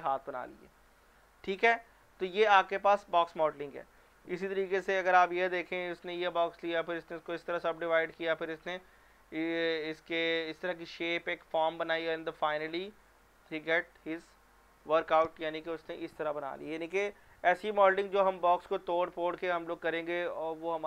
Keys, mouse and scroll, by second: 3.2 scroll down 1, 5.3 click.